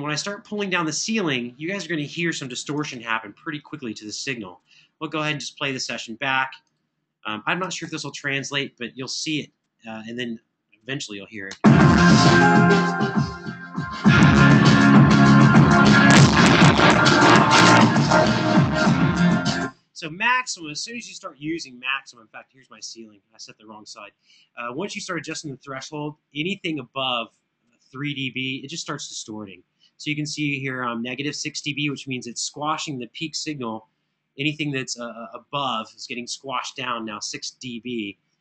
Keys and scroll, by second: 2.8 super+=, 5.8 Escape, 7.6 super+=, 11.3 space, 19.3 space.